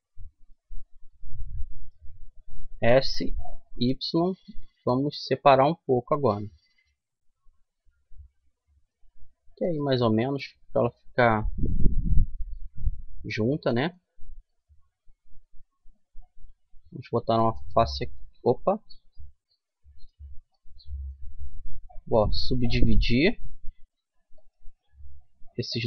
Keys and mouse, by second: 2.4 s, 10.1-14.2 middle drag, 14.2-16.4 drag, 16.4 right click, 16.4 f, 16.9-18.6 middle drag, 18.6 ctrl+z, 22.0 w.